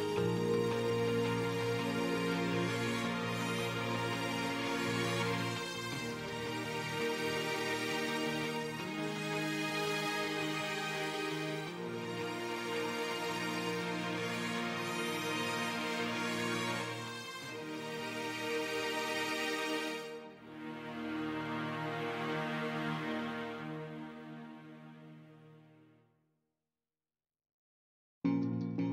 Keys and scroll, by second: 9.1 space, 10.3 space, 20.0 ctrl+space, 20.3 ctrl+space.